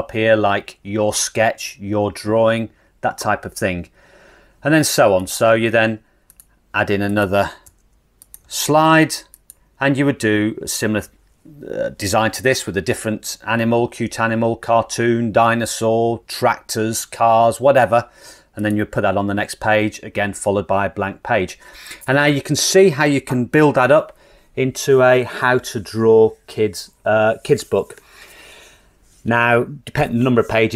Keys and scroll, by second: 7.7 BackSpace, 8.9 BackSpace.